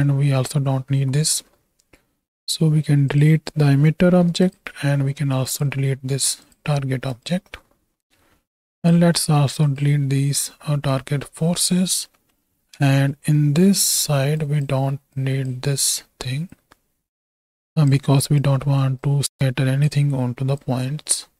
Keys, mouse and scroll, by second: 0.8 x, 4.3 x, 5.6-6.1 right drag, 6.1 x, 7.1 right click, 8.0 middle click, 8.8 click, 9.2 ctrl+x, 9.6 click, 10.8 ctrl+x, 11.4-11.8 middle drag, 12.2 middle click, 12.8 ctrl+x, 12.8 ctrl+space, 13.9 middle click, 14.3 click, 15.1 click, 16.5-17.9 drag, 18.1 ctrl+click, 19.0 click, 20.6-21.3 drag.